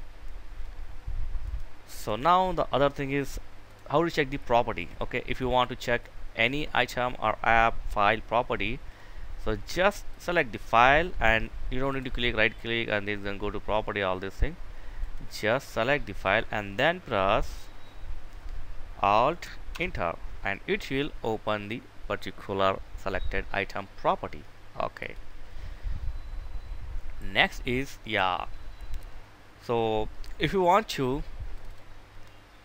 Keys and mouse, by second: 1.2-2.3 right drag, 2.4 click, 3.0 right click, 4.1 click, 11.2 right click, 14.3-15.4 drag, 19.0 Return, 24.3 click, 31.3 click.